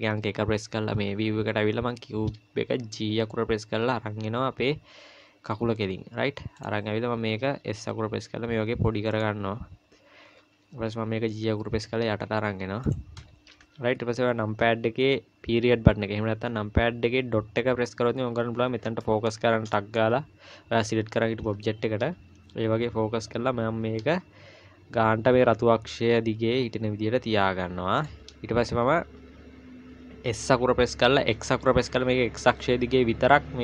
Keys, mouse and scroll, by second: 0.6-1.7 scroll up 5, 3.0 g, 7.6 s, 9.5-9.8 scroll up 2, 10.4 g, 17.6 KP_Decimal, 18.6-18.9 scroll down 3, 19.0 shift+middle click, 20.1 shift+middle click, 23.0-24.0 scroll up 1, 24.0 g, 30.3 s.